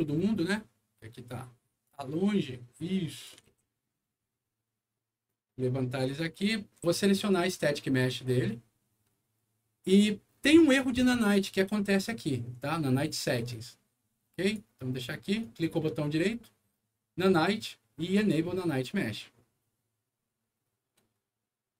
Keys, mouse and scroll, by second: 0.0-0.5 scroll down 2, 1.8-3.2 drag, 3.4 alt+w, 4.1 alt+middle click, 5.4 alt+click, 6.8 s, 7.1 click, 7.3 click, 9.1 middle click, 9.1-9.7 scroll up 2, 9.5 middle click, 14.4 click, 15.3 right click, 18.1 click.